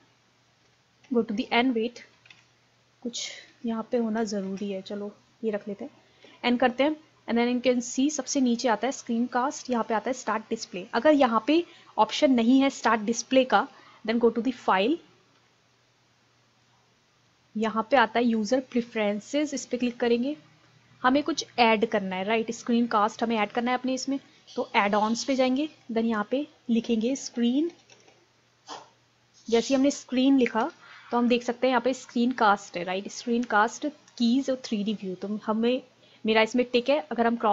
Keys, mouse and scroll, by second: 10.7 click.